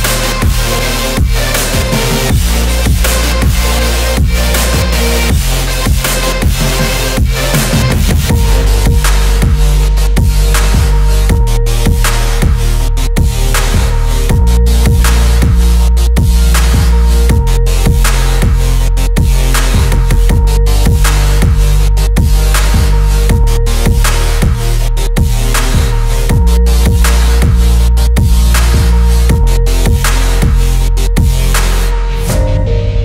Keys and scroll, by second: 4.8 ctrl+t, 12.1 Return, 12.4 =, 14.0 ctrl+=, 24.0 ], 25.3 [, 25.6 ], 26.2 ctrl+=, 26.3 [, 26.8 ], 27.8 ctrl+=, 28.2 [, 30.9 ].